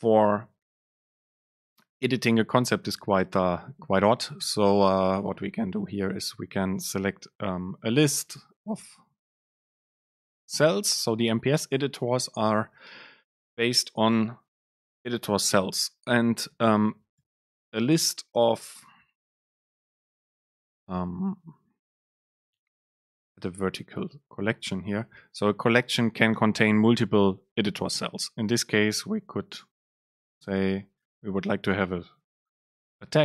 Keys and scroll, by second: 4.5 BackSpace, 4.9 super+space, 29.4 super+space.